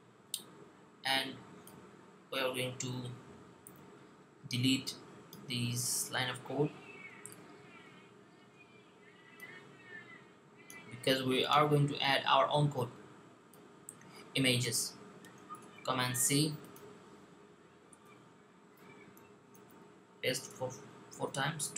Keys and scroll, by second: 15.4 super+c, 19.3 super+v, 21.0 v.